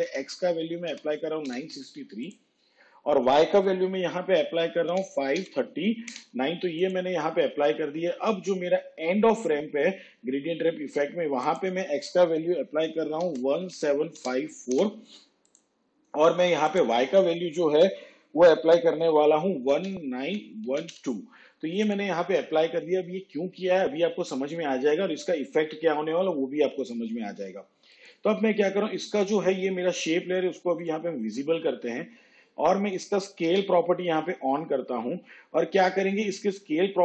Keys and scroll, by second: 0.2 9, 5.0 5, 13.3 1, 13.8 7, 19.8 1, 33.6 s.